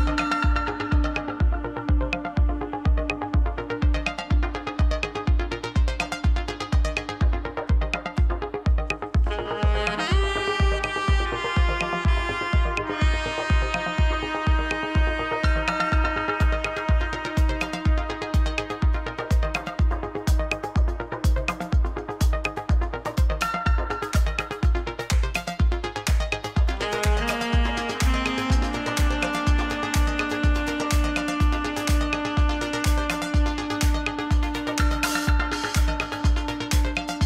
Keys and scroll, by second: 0.0-5.3 typing, 24.2-29.8 typing.